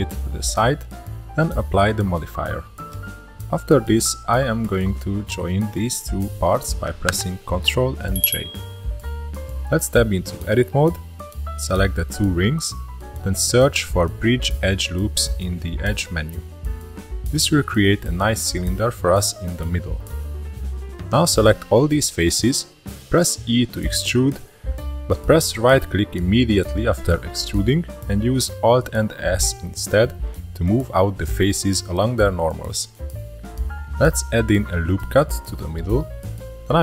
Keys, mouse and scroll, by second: 0.1 click, 0.5-1.2 shift+middle drag, 1.2 click, 2.5-3.1 shift+middle drag, 3.1-4.3 drag, 4.3-5.2 shift+middle drag, 5.2 shift+click, 5.6-7.5 shift+middle drag, 7.5 ctrl+j, 8.9-10.6 shift+middle drag, 10.6 Tab, 11.0 shift+middle click, 11.4 2, 11.9 alt+click, 12.4 alt+shift+click, 13.5 scroll up 1, 13.6-15.2 shift+middle drag, 15.2-18.2 drag, 18.3 3, 18.9-20.5 shift+middle drag, 20.5-21.2 scroll up 1, 21.2 e, 23.5 alt+s, 30.2-31.9 shift+middle drag, 31.9 scroll down 3, 32.7-33.2 scroll up 2, 33.4 scroll up 1, 33.6 ctrl+r, 35.6 shift+middle click, 36.2 3, 36.6 shift+click.